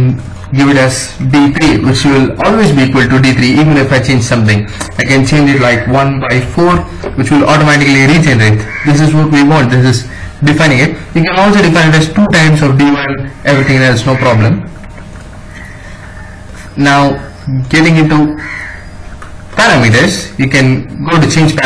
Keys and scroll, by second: 0.8 d, 1.0 3, 1.6 Return, 5.1-6.5 typing, 7.8 Escape, 19.3 Escape.